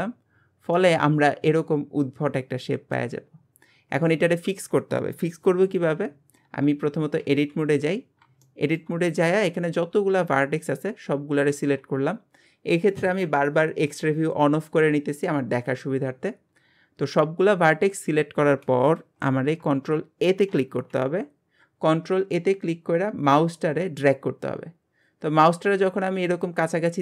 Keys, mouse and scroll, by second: 0.7-3.5 middle drag, 3.5 scroll up 2, 6.4 Tab, 6.8-7.2 scroll up 3, 7.2 alt+z, 7.6 scroll up 2, 8.4-11.5 shift+middle drag, 11.5 a, 20.5 ctrl+a.